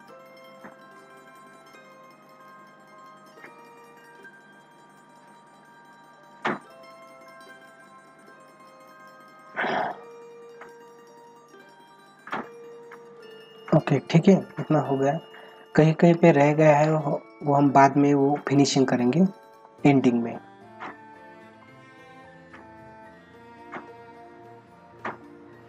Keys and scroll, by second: 4.7 ctrl+-, 12.7 ctrl+-, 15.1 ctrl+-, 16.1 space, 17.2 ctrl+-, 21.9 ], 23.5 ctrl+-.